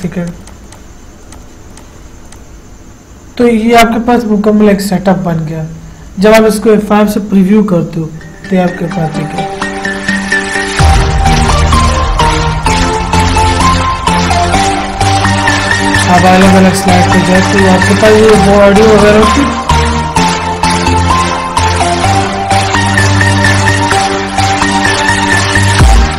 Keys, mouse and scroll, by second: 7.8 F5, 16.7 Right, 21.3 Right, 25.2 Left.